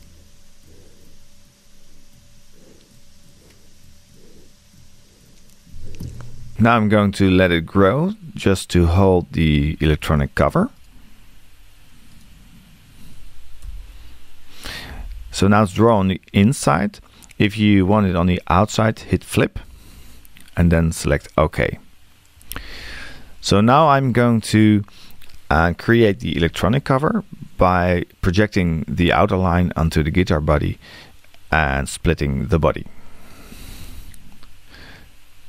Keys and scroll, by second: 6.0 Return, 13.6 5.